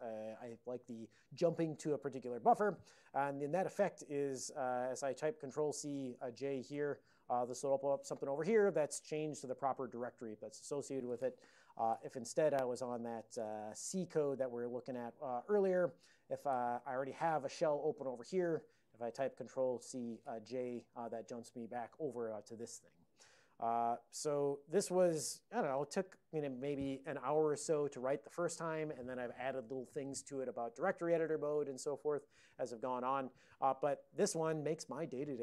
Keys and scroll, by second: 5.6 ctrl+c, 11.8 alt+o, 12.3-14.0 typing, 14.9 Return, 20.0 ctrl+c, 20.8 j.